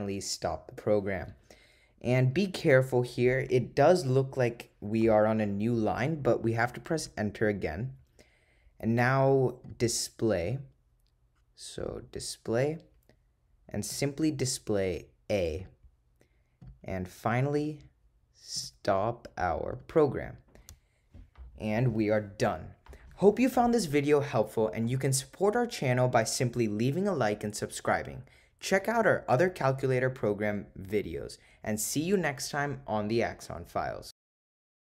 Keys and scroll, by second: 7.0 Return, 10.5 Right, 11.9 3, 16.7 Return.